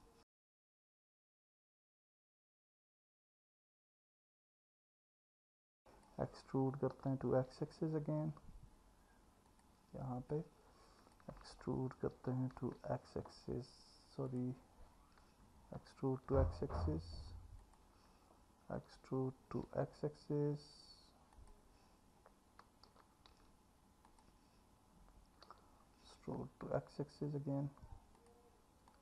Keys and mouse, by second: 1.4 e, 2.0 x, 5.7 click, 7.0 e, 7.5 x, 9.5 click, 10.3 click, 12.2 e, 13.2 x, 15.8 e, 16.3 x, 17.6 click, 18.8 e, 19.7 x, 21.3 click, 22.9 e, 23.3 x, 25.5 e, 26.6 x.